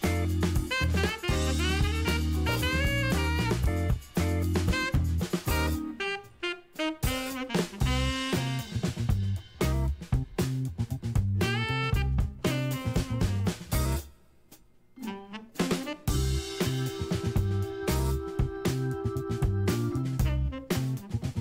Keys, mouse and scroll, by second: 0.4 click, 1.5-9.1 drag, 12.2-17.4 drag, 18.9-20.9 drag.